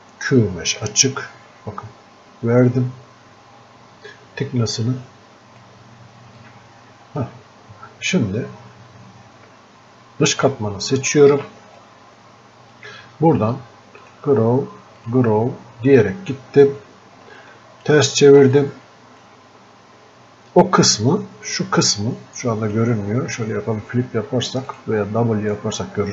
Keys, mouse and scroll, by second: 0.9-6.4 drag, 6.4-8.7 drag, 8.7-9.0 scroll up 1, 9.0-9.4 scroll down 2, 10.4 ctrl+shift+click, 11.8-14.1 drag, 17.4 ctrl+shift+click, 18.6-22.4 shift+drag, 24.7-26.1 drag.